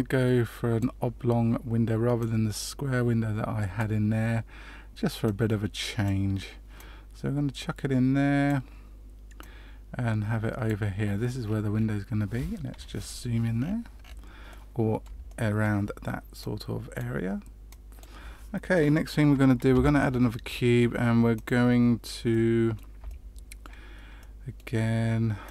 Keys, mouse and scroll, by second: 2.1 click, 5.2 click, 6.7 click, 9.3 click, 11.4-12.4 scroll up 5, 12.7 KP_Decimal, 13.5-13.9 scroll down 3, 13.8 scroll up 1, 13.9-14.4 scroll down 3, 14.4 middle click, 15.2 shift+middle click, 16.3 click, 17.6 click, 19.7 shift+a, 22.3 middle click, 23.0 shift+middle click, 24.1 middle click, 25.4 click.